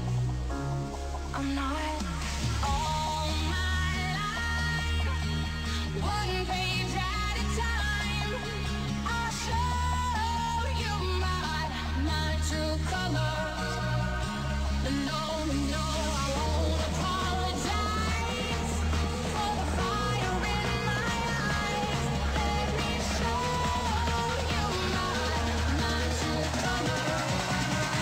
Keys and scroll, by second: 8.8 ctrl+s, 14.6 space, 23.8 ctrl+s.